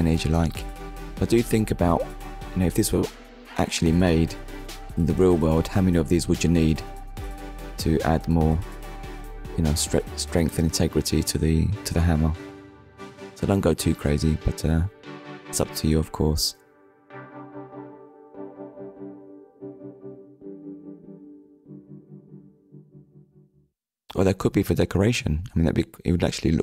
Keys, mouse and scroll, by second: 0.5 ctrl+s, 5.2 click, 6.2 middle click, 6.9 click, 8.3 shift+click, 10.7 right click, 11.5 middle click, 13.2-13.6 scroll down 2, 13.6 shift+middle click, 14.7 middle click, 15.6 middle click, 17.5 middle click, 18.4 shift+middle click, 18.8 middle click, 23.0 shift+s, 25.0 click, 26.0 middle click.